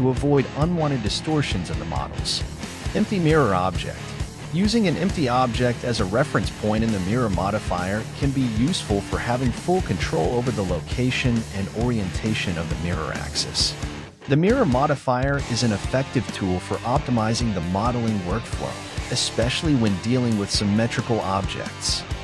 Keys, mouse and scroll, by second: 0.6 z, 2.4 shift+middle click, 3.2-3.9 scroll up 3, 3.9-6.0 middle drag, 6.0 KP_1.